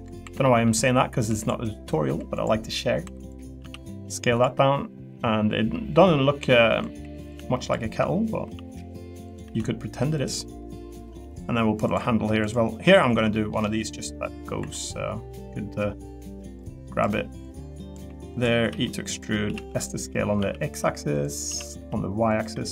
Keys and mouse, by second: 0.2 2, 0.4 middle click, 1.3 2, 1.4 click, 2.4 click, 3.0 2, 3.6 s, 4.3 click, 4.5 middle click, 6.0 click, 7.0 3, 7.6 shift+click, 8.4 i, 9.4 e, 10.1 click, 10.5 middle click, 11.2 middle click, 12.5 click, 12.9 middle click, 13.6 middle click, 14.6 2, 17.6 click, 18.0-20.4 typing, 18.4 click, 21.5 s, 21.8 y, 22.5 e.